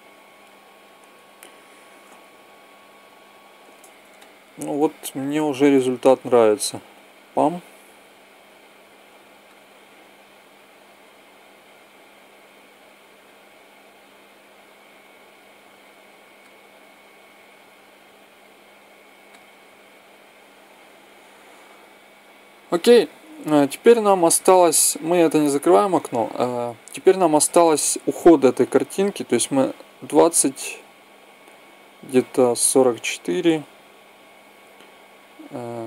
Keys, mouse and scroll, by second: 1.1 Escape, 1.8 alt+a, 6.0 click, 11.9 click, 13.1-14.7 drag, 16.2 click, 17.4 click, 19.0 click, 19.7-20.7 drag, 22.3 Escape, 25.9-27.3 drag, 26.7-28.5 middle drag, 28.1-30.0 drag.